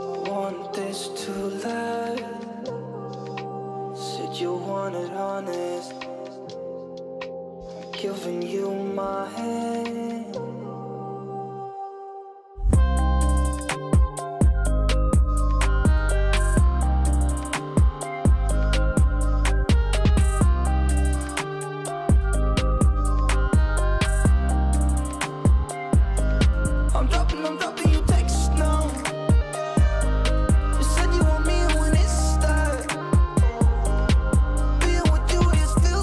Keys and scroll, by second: 14.5 ctrl+space, 23.7 ctrl+space.